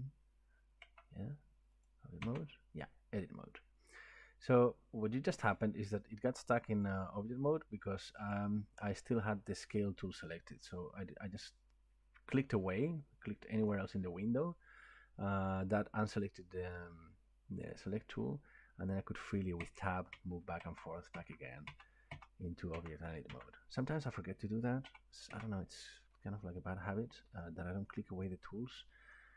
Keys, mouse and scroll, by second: 0.9 Tab, 1.9 click, 2.2 Tab, 6.8 click, 8.3 click, 13.7 click, 19.6 Tab, 20.1 Tab, 20.6 Tab, 21.1 Tab, 21.7 Tab, 22.1 Tab, 22.7 Tab, 23.3 Tab, 24.8 Tab, 25.3 Tab, 26.5 middle click, 27.9 shift+middle click, 28.8 middle click.